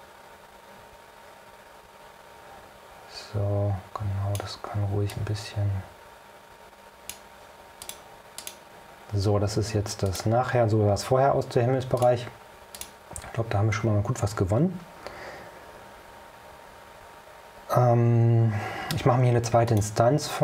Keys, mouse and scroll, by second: 5.2-7.4 drag, 7.9 click, 8.5 click, 10.2 click, 12.1 click, 12.8 click, 19.8 click.